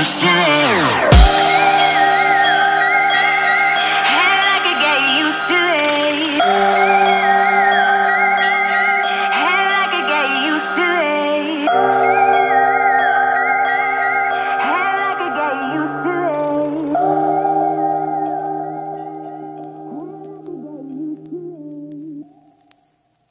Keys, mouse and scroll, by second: 2.6 F10, 3.3 click, 3.7 right click, 5.3 click, 6.2-8.8 typing, 8.8 Return, 10.1-12.9 drag, 13.6 ctrl+c, 13.9 ctrl+v, 14.3-16.2 drag, 21.9 F11, 23.0 click.